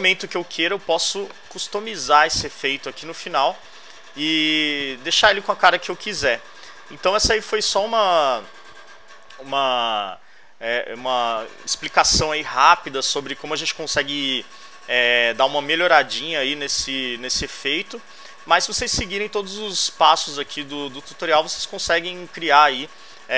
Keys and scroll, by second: 17.7 alt+Left.